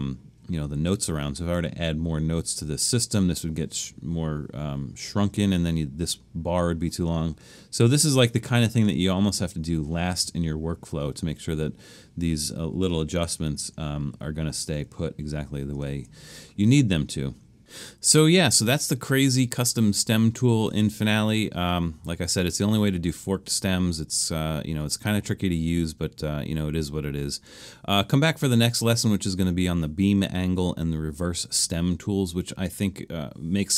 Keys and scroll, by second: 13.7 super+-, 14.2 super+-, 14.8 super+-, 15.9 super+-, 31.8 super+-, 32.3 super+-.